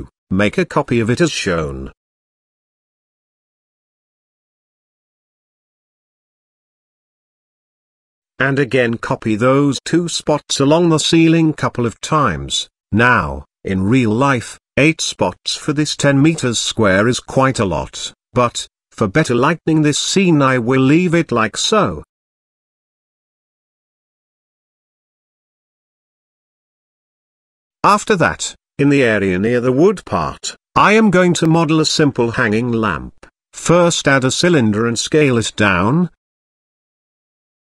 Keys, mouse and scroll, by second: 4.3 shift+d, 7.1 shift+middle click, 8.1 click, 9.1 shift+click, 10.3 shift+d, 13.4 shift+r, 14.8 shift+r, 15.7 g, 17.9 click, 18.6 shift+click, 19.2 shift+click, 19.9 g, 24.2 KP_0, 25.1 click, 25.4 z, 26.5 click, 27.4 click, 28.1 KP_Decimal, 29.7 click, 30.2 click, 31.0 shift+a, 35.9 s, 37.4 KP_Decimal.